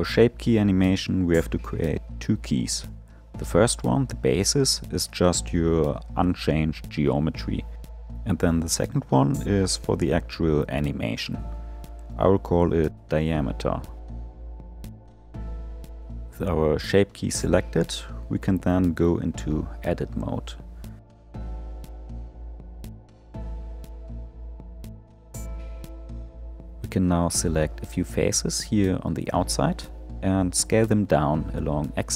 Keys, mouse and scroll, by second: 0.9 click, 3.7 click, 6.2-9.3 drag, 10.0-11.8 drag, 11.9-15.0 drag, 20.0 Tab, 20.8 middle click, 21.1 scroll up 6, 21.3-22.5 shift+middle drag, 22.5 click, 23.2 3, 23.7-26.3 middle drag, 26.3 alt+click, 27.4 alt+shift+click, 28.2-30.1 middle drag, 30.1 shift+click.